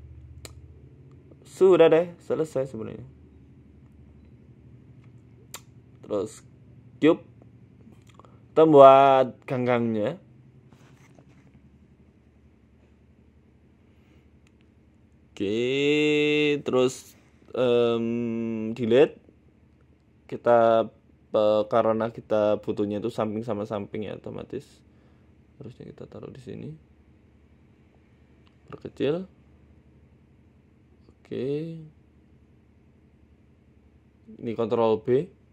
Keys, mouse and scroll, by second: 0.3 KP_1, 0.7-1.2 scroll up 8, 1.7 shift+middle click, 2.4 shift+a, 4.4 right click, 5.1 shift+a, 8.0 scroll down 2, 9.5-10.3 scroll down 6, 10.8 middle click, 11.9 KP_1, 12.3 s, 13.9 click, 15.1 click, 15.3 scroll up 8, 15.8 ctrl+r, 16.5-16.8 scroll down 5, 16.8 Tab, 17.3 ctrl+r, 18.0 click, 18.7 Delete, 19.8 Tab, 20.0 s, 21.5-22.0 scroll up 6, 22.1 shift+middle click, 22.6 Tab, 23.3 Tab, 23.7 g, 24.8 Tab, 25.4 a, 25.9 g, 27.1 middle click, 27.7 s, 29.0 middle click, 29.6 click, 30.2 KP_1, 31.0 middle click, 32.3 middle click, 32.8 KP_7, 33.5 click, 34.4 shift+click.